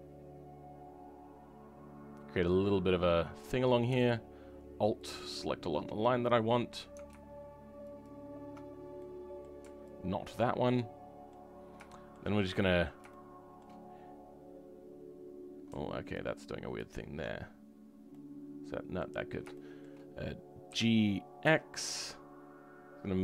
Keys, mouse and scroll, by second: 10.2 ctrl+Left, 10.7 middle click, 11.4 scroll up 2, 11.8 shift+middle click, 12.2 scroll up 2, 12.5-16.7 middle drag, 16.7 ctrl+click, 17.5 scroll down 2, 18.0-19.1 middle drag, 19.1-19.4 scroll up 2, 19.4-20.7 shift+middle drag, 20.7 g.